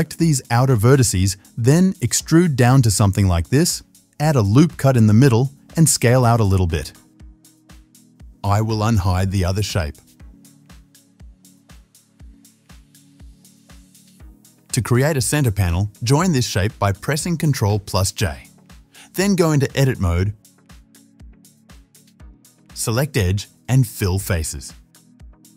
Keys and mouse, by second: 1.3 shift+z, 2.3 e, 4.7 ctrl+r, 5.4 s, 7.3 Tab, 7.7 middle drag, 7.9-9.6 middle drag, 8.8 click, 9.6 click, 9.8 middle click, 10.7-11.6 drag, 12.2 h, 13.4 click, 14.8-16.0 drag, 17.9 ctrl+j, 19.3 Tab, 20.4 alt+h, 20.7 click, 20.9-22.5 middle drag, 22.5 click, 22.5 right click, 22.9 right click, 23.1 shift+middle click, 23.2 shift+click, 23.3-24.4 shift+middle drag, 24.4 click, 24.4 right click, 24.5 middle click, 24.6 click, 24.6 right click, 24.7 click, 24.9 shift+middle click.